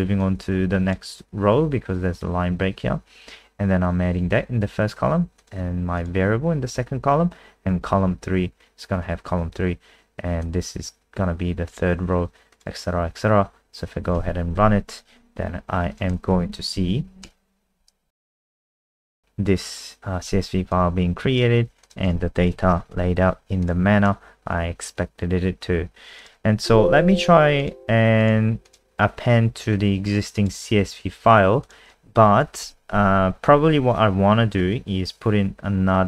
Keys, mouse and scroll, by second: 14.1 ctrl+s, 14.5 F5, 15.9 click, 16.5 Home, 16.7 Down, 17.2 Return, 20.7 click, 22.1 ctrl+a, 22.3-23.4 typing, 23.6 click, 26.6 ctrl+w, 27.6 click.